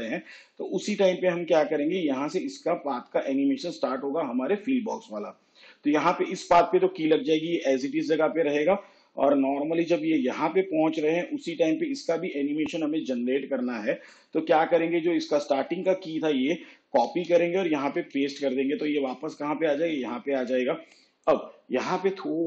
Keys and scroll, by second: 17.1 ctrl+c, 17.8 ctrl+v.